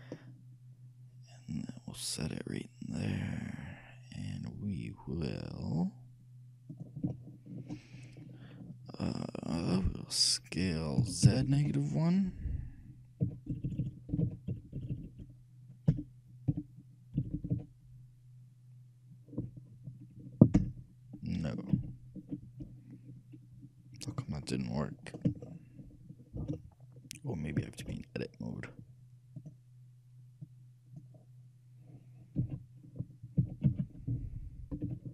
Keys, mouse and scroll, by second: 7.3-9.0 shift+middle drag, 11.2 s, 21.9 ctrl+z, 25.6-28.6 shift+middle drag, 29.6-31.4 shift+drag, 33.0 a, 33.5 s.